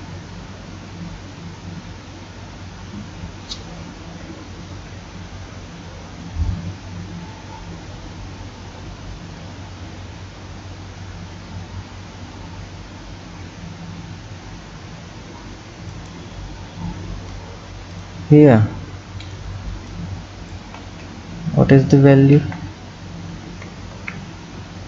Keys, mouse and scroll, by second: 17.9 click, 18.6-19.9 scroll up 3, 19.9 click, 20.8 ctrl+z, 21.4-22.4 scroll down 2, 22.4 ctrl+z, 23.5 r.